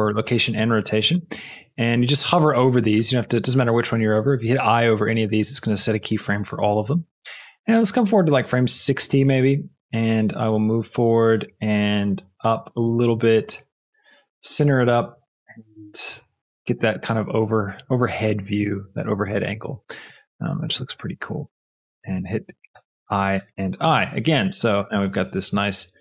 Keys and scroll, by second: 22.8 shift+i, 23.3 i, 24.8 space.